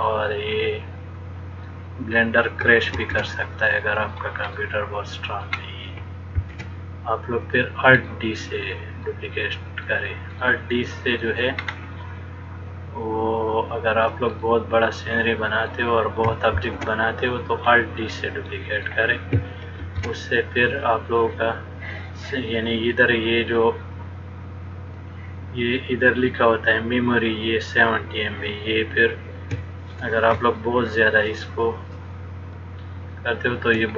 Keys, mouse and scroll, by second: 0.3 middle click, 3.2 shift+d, 4.7 middle click, 6.6 shift+d, 8.2 middle click, 10.6 middle click, 11.7-12.2 scroll up 2, 12.8 click, 14.7 middle click, 17.1 shift+d, 18.5 middle click, 20.1 shift+d, 30.7 middle click.